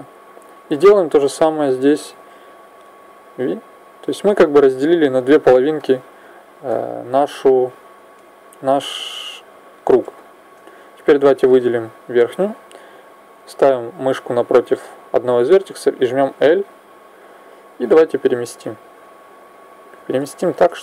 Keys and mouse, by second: 0.2 right click, 5.6-12.0 middle drag, 16.1 l, 18.2 click, 20.1 middle click.